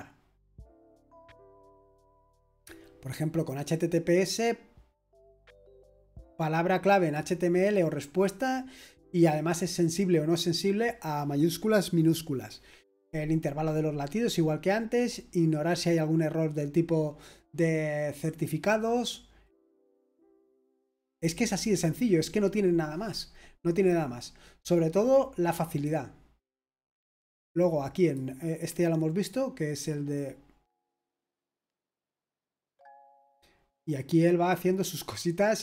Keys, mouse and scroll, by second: 0.4 click, 2.2-3.2 scroll down 1, 3.2-10.2 scroll up 1, 10.2-14.2 scroll down 1, 14.2-18.5 scroll down 1, 19.4-20.0 scroll down 1, 20.0-20.5 scroll down 1, 20.5-23.3 scroll up 1, 23.3-25.7 scroll up 1, 25.7 click, 27.9-30.8 drag, 30.8-31.9 scroll down 2, 31.9-35.5 scroll down 1, 35.5-35.6 scroll up 2.